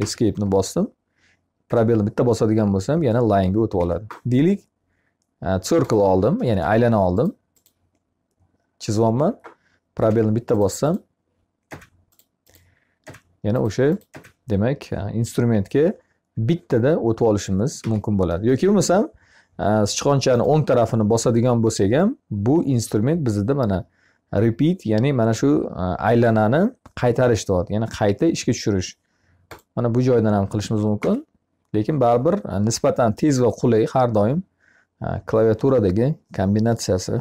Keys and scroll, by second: 1.5 space, 3.6 Escape, 9.4 space, 17.7 Escape, 30.4 Escape.